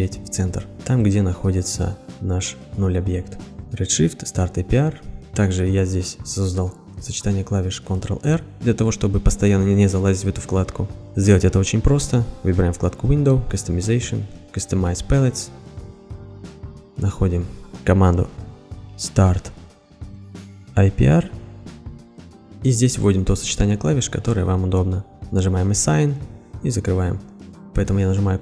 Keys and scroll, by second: 18.4-21.0 typing.